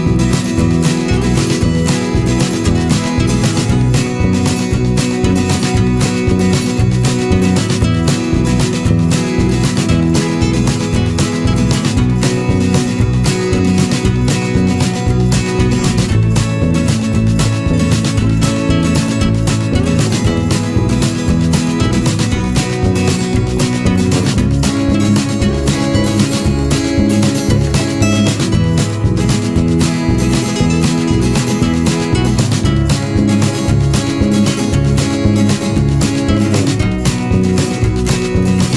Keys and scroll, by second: 15.8 Return, 31.6 ctrl+=, 31.8 ctrl+space, 32.2 ctrl+=, 36.7 ctrl+z.